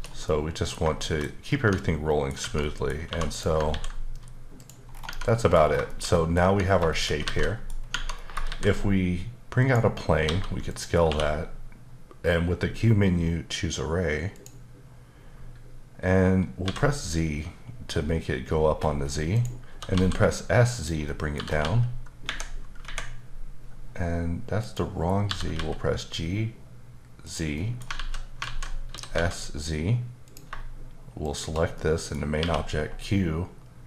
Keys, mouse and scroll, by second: 1.0 shift+middle click, 1.3 scroll up 1, 1.5 Tab, 1.8 middle click, 2.4 Tab, 3.0 2, 3.3 click, 3.7 ctrl+x, 4.6 click, 4.9 scroll down 2, 5.0 Tab, 5.2 middle click, 5.6 scroll down 2, 5.9 shift+middle click, 6.4 Tab, 6.7 scroll down 1, 6.9 shift+middle click, 7.2 alt+a, 7.4 middle click, 7.8 scroll down 1, 7.9 Tab, 8.4 shift+a, 9.6 click, 10.2 s, 10.7 click, 11.0 q, 14.3 click, 16.6 z, 17.9-19.2 scroll up 10, 19.3 click, 19.7 typing, 20.7 click, 21.0 middle click, 21.3 typing, 22.3 Escape, 22.8 Escape, 23.5-24.6 scroll up 1, 24.6 click, 25.3-25.6 typing, 27.2 click, 27.6 middle click, 27.9 alt+z, 28.4 alt+z, 28.9 typing, 30.2 click, 31.2 shift+click, 31.7 middle click, 32.4 q.